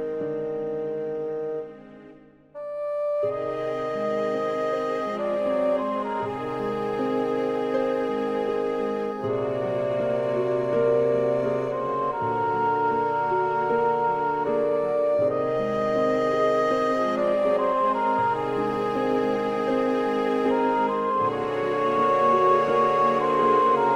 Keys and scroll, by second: 2.6 super+z, 19.1 super+z.